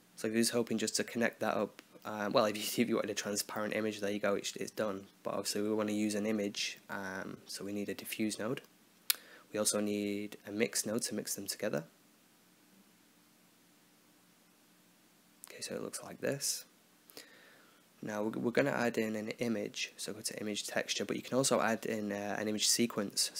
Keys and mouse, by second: 0.6-1.7 drag, 3.5 shift+a, 8.5 shift+a, 11.1-12.8 drag, 13.2 click, 17.2 middle click, 17.9 shift+a, 22.4 click.